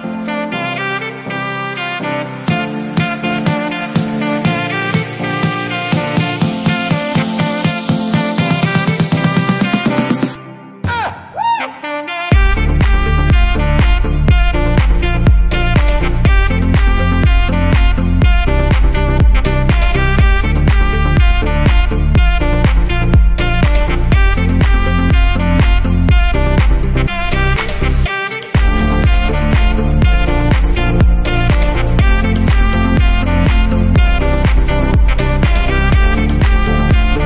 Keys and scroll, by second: 8.8 shift+m.